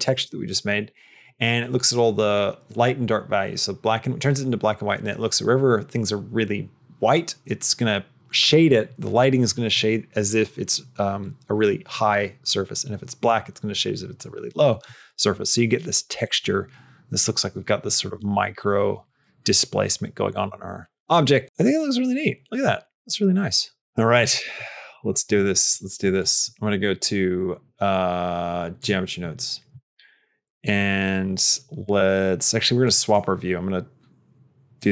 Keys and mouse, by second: 26.0-28.7 drag, 32.8 click, 34.7 click.